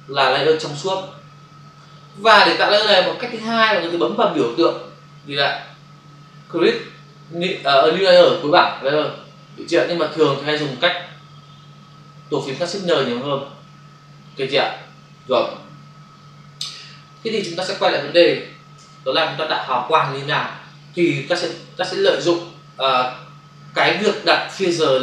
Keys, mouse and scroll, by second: 17.1 click, 22.1 ctrl+o, 23.9 space.